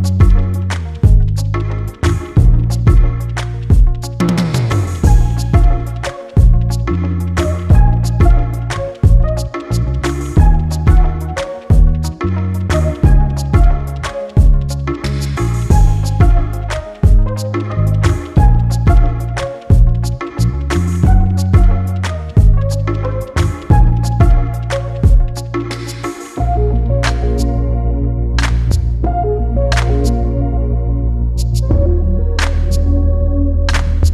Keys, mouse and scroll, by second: 0.0-0.4 scroll up 4, 0.4 click, 0.6-1.0 scroll up 2, 1.0 s, 1.8 s, 2.8 s, 4.1 g, 5.4-5.9 scroll down 1, 5.9 click, 6.1 3, 6.7 click, 6.8 click, 7.2 Tab, 7.7 click, 8.2 g, 9.7 ctrl+r, 11.3 click, 11.7 scroll down 4, 11.9 g, 12.9 e, 13.8-14.2 scroll down 1, 14.2 click, 14.5-14.9 scroll up 7, 14.9 g, 15.8 scroll down 1, 16.0 Tab, 16.2 click, 16.7 click, 16.9-17.4 scroll up 4, 17.4-17.8 scroll down 1, 17.8 ctrl+z, 17.9 ctrl+z, 18.0 ctrl+z, 18.6 3, 18.8 click, 19.0 click, 19.5 e, 20.6 click, 21.1 click, 21.7 scroll down 1, 21.9 Tab, 22.0 click, 22.2-22.6 scroll up 2, 22.6 scroll down 1, 22.7 scroll up 1, 22.9-23.3 scroll down 1, 23.3 click, 23.5 scroll up 3, 23.6 scroll down 1, 23.9 click, 24.3 scroll up 1, 24.5 click, 25.0 scroll down 2, 25.1 click, 25.3 click, 25.4 Tab, 25.6 Tab, 25.8 click, 25.9 Tab, 26.0 click, 26.2 Tab, 26.4 click, 26.6 shift+click, 27.4 shift+click, 28.2 shift+d, 30.6 Tab, 30.8 Tab, 31.1 p, 32.2 Tab, 32.3 e, 32.8 right click, 33.5 ctrl+z, 33.8 click, 34.0 Tab.